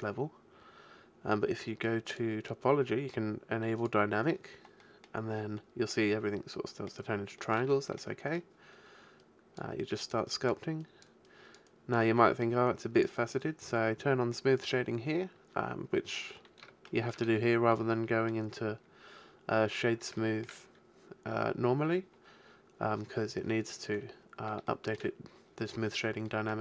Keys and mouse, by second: 2.1-4.8 drag, 5.0-7.7 middle drag, 9.2-14.5 drag, 16.1 click, 17.7-19.9 middle drag, 20.2-23.2 middle drag, 24.7-26.6 middle drag.